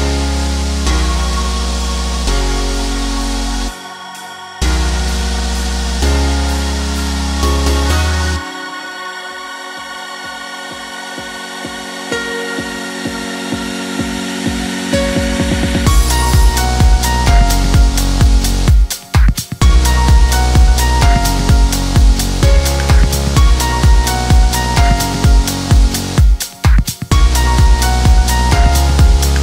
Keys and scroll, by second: 1.7 5, 1.9 Return, 4.7 5, 5.1 Return, 13.4 7, 13.7 Return, 19.2 1, 19.5 Return.